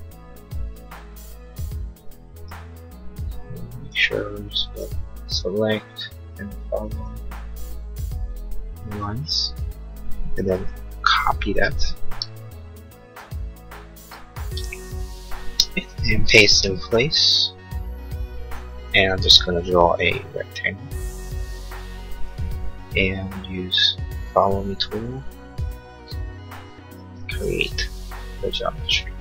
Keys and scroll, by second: 11.1 ctrl+c, 14.6 ctrl+c.